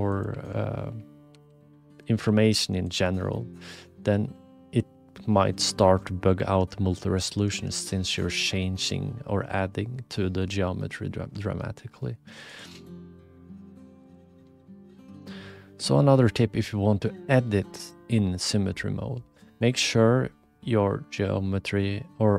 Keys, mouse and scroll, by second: 0.3 e, 2.2 g, 3.8 click, 6.6 ctrl+z, 7.2 ctrl+z, 7.4 ctrl+z, 7.6 ctrl+z, 7.7 ctrl+z, 8.9-10.4 middle drag, 11.5 shift+middle click, 12.5 click, 14.0 click, 14.9 ctrl+alt+KP_2, 17.8 click, 19.2 click.